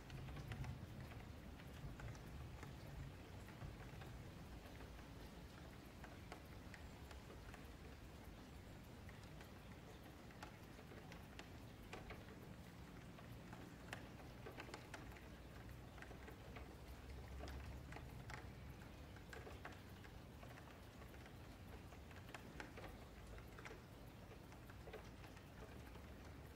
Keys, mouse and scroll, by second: 0.2 ctrl+2, 0.2-1.8 middle drag, 0.7-1.3 scroll down 1, 2.5 click, 2.7-3.9 middle drag, 2.7-3.1 scroll down 1, 3.9 click, 6.3-8.4 middle drag, 8.4 click, 9.6-11.2 middle drag, 11.2 click, 12.2 middle click, 13.0 Tab, 13.9 click, 14.4 click, 15.0 middle click, 15.6 Tab, 15.9 3, 16.1 click, 17.1 q, 18.3 middle click, 18.6 Tab, 18.8 click, 19.1 Tab, 19.5 Tab, 19.7 click, 20.1 Tab, 20.2 3, 20.4 click, 21.5 s, 22.9 middle click, 23.3 Tab, 23.6 click, 23.8 Tab, 24.0 click, 24.6 click, 25.0 click, 25.3 click, 25.7 click, 26.1 click, 26.4 Tab.